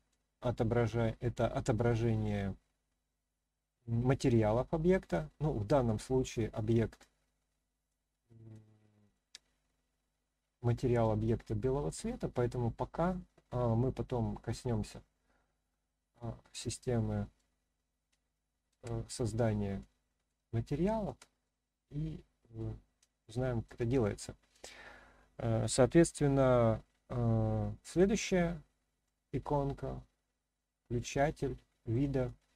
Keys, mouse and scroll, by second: 0.4-1.4 scroll down 1, 1.4-1.9 middle drag, 1.4 scroll down 1, 2.1-2.6 scroll up 1, 4.5-6.7 middle drag, 7.9-8.5 middle drag, 9.1-11.0 middle drag, 11.5-12.0 scroll down 1, 12.0 scroll up 1, 12.6-14.5 scroll up 1, 14.5-15.6 scroll up 1, 16.8-17.4 middle drag, 18.2 shift+scroll up 1, 18.2-18.7 shift+middle drag, 19.1-19.8 scroll down 1, 19.8-20.3 middle drag, 20.7-21.1 shift+middle drag, 21.4-22.6 middle drag, 23.2-23.7 shift+middle drag, 24.0-24.5 middle drag, 27.9 click, 29.0-31.9 middle drag, 32.4-32.5 middle drag.